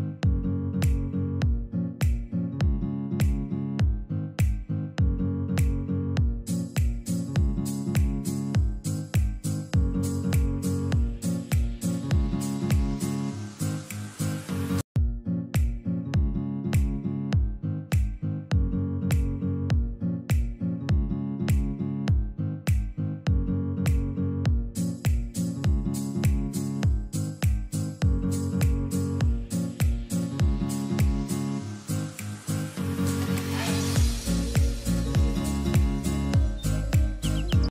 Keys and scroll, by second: 8.2 F3, 9.8 ctrl+r, 11.0 ctrl+g, 11.5 c, 11.9 Escape, 13.7 F2, 18.9 space, 28.2 shift+Page_Down, 30.7 F3, 31.3 Escape, 32.9 shift+F2, 33.6 F9, 35.7 Escape.